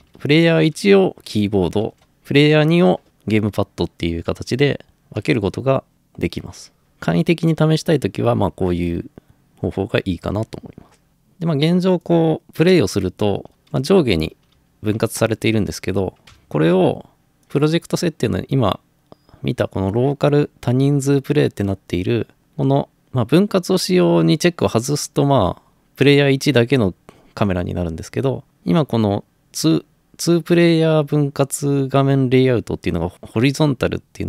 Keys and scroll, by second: 0.0-0.7 typing, 1.9-2.6 typing, 6.8 Escape, 12.9-15.0 typing, 16.4 Escape.